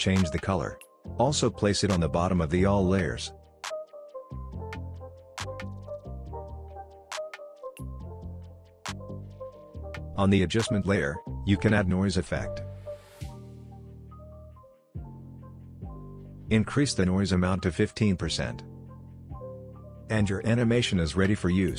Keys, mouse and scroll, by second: 1.0-7.1 drag, 12.4-14.1 typing, 15.2 click, 18.2 Return, 19.4-19.8 scroll down 1, 19.8-20.9 scroll up 1, 20.9 click, 21.3 space.